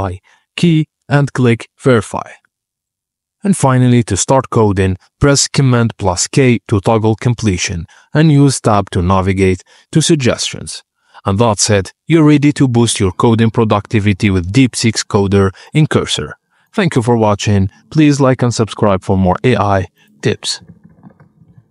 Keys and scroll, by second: 20.4-21.7 typing.